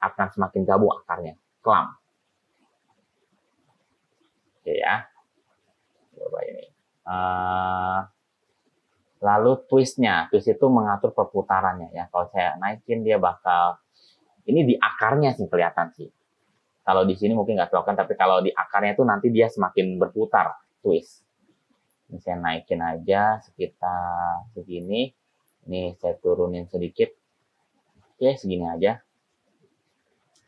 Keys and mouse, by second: 12.5-15.1 middle drag, 15.1 click, 22.1-24.9 drag, 25.7-28.5 drag.